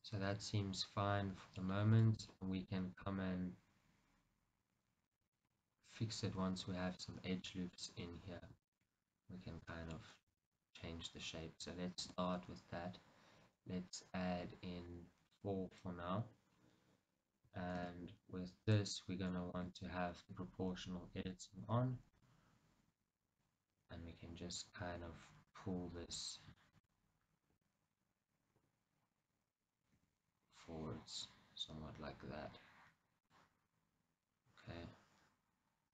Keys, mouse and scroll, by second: 1.8 scroll, 2.4 scroll, 8.2-10.3 middle drag, 8.2-8.7 scroll, 10.3 Tab, 11.0-12.1 scroll down 2, 12.1 ctrl+r, 15.9 right click, 16.7-17.9 scroll up 2, 17.9 shift+z, 18.8 click, 19.7 shift+z, 21.1 z, 21.4 o, 22.2 g, 25.6 click, 26.7-27.7 shift+middle drag, 27.7 KP_1, 29.6-30.0 scroll down 2, 30.0 g, 33.3 click.